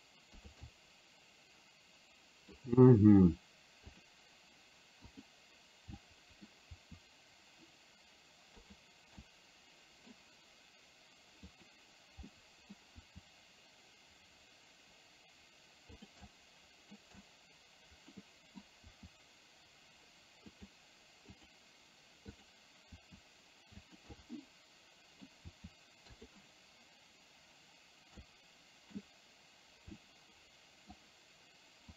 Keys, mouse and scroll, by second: 0.8-2.7 middle drag, 5.3 click, 6.2 middle click, 7.2 r, 9.2-10.2 middle drag, 11.6 click, 12.3 middle click, 13.2 r, 16.4 middle click, 17.2-18.2 middle drag, 18.3 middle click, 19.1 r, 21.4 click, 22.4 click, 22.9 r, 24.3-25.3 middle drag, 25.7 r, 28.3 middle click, 30.2 middle click.